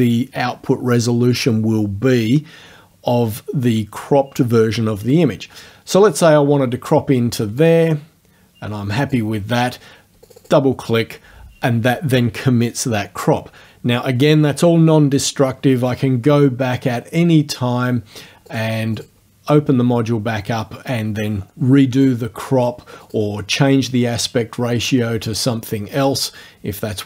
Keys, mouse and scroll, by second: 7.6-9.3 drag, 10.3 click, 18.5 click, 19.0 click, 23.1 click, 25.3 click.